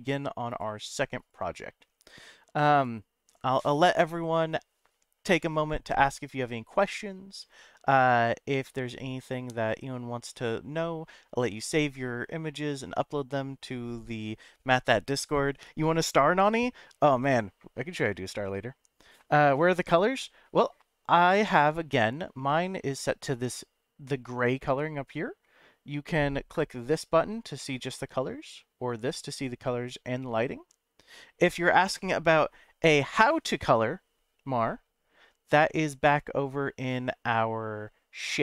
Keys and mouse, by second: 22.5-22.8 middle drag, 26.8 click, 27.6-28.5 middle drag, 29.3 click.